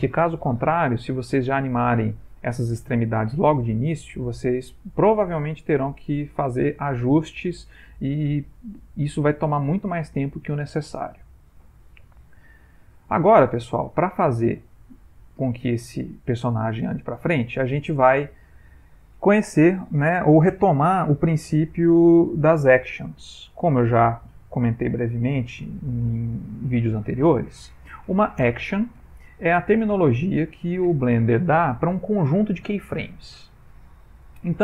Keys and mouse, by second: 13.0 ctrl+middle click, 13.6 middle click, 15.5 ctrl+Tab, 16.6 middle click, 17.2 ctrl+middle click, 18.4 ctrl+Tab.